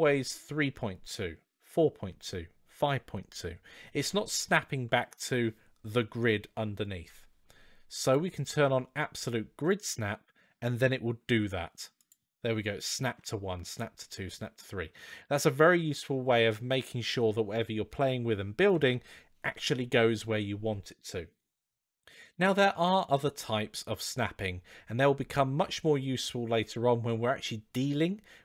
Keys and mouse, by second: 7.8-10.0 drag, 11.1 g, 12.8 g, 22.2-28.4 drag.